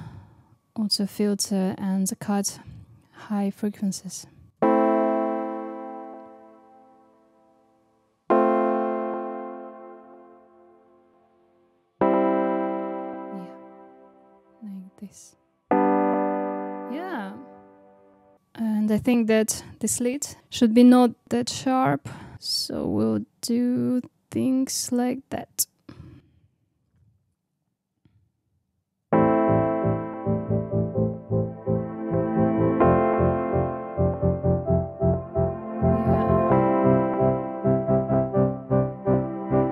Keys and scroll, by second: 4.5 space, 29.0 space.